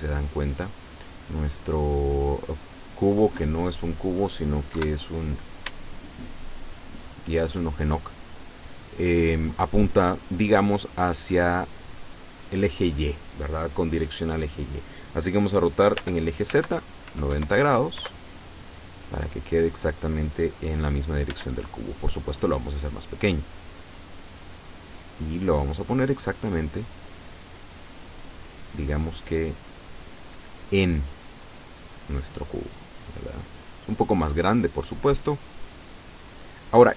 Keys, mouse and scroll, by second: 0.0-1.8 drag, 3.3-4.3 middle drag, 4.8 KP_7, 5.9-7.6 shift+middle drag, 16.1 r, 16.6 z, 17.1 KP_9, 17.3 KP_0, 18.0 KP_Enter, 18.9-19.3 scroll down 2, 21.4 s, 23.9 click, 24.7-26.1 drag, 26.4 click, 27.4-29.5 middle drag, 30.5-32.7 drag, 32.9-34.6 middle drag, 34.7 middle click, 34.9 scroll up 2, 35.9-36.6 scroll up 1, 36.7 middle click.